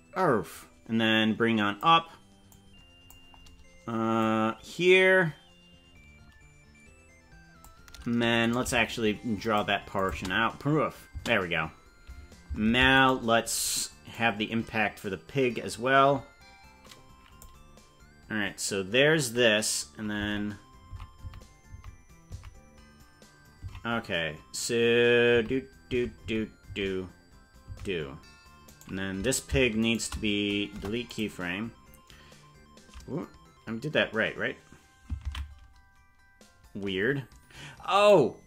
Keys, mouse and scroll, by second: 2.5 click, 4.2-7.7 drag, 8.5 right click, 8.7 g, 10.0 click, 10.2 space, 11.3 space, 12.7 ctrl+Tab, 13.1 right click, 14.1-17.4 drag, 20.2 Left, 20.9 Left, 21.2 Right, 21.7 Right, 22.3 Right, 23.6 Left, 25.3 Right, 25.9 Right, 26.2 Right, 26.7 Right, 27.7 Right, 28.6 right click, 29.8 shift+right click, 30.8 Delete, 35.6 ctrl+z, 38.0-38.4 right drag.